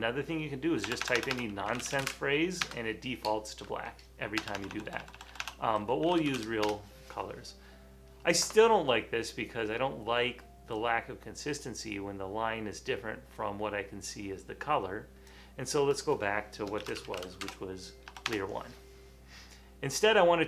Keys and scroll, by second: 1.0-2.9 typing, 4.5-7.2 typing, 16.9-18.3 typing, 17.5 Return.